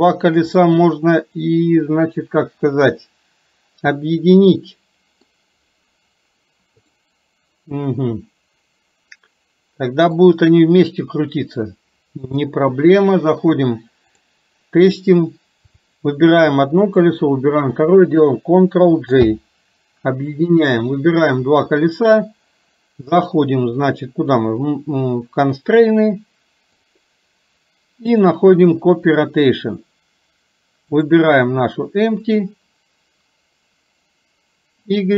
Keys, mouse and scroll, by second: 0.8-5.4 middle drag, 7.0-10.2 middle drag, 12.5-14.2 drag, 17.0 shift+click, 26.0 click, 26.9 click, 28.2 click, 31.1 click, 34.8 click.